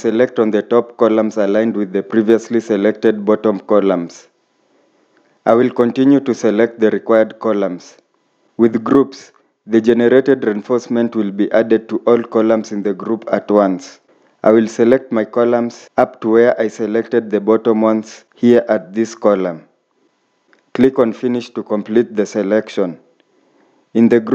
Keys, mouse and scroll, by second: 9.0-9.3 scroll up 1, 12.6 scroll down 1, 20.2-22.7 scroll down 1.